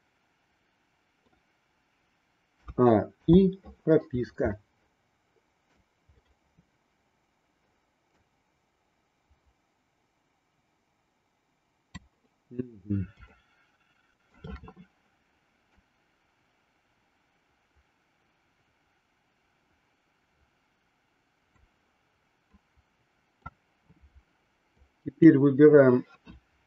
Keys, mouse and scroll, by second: 3.2 i, 4.7-5.7 middle drag, 8.2-12.0 drag, 13.2-14.4 shift+middle drag, 15.7-21.6 drag, 22.6 middle click, 24.8 click.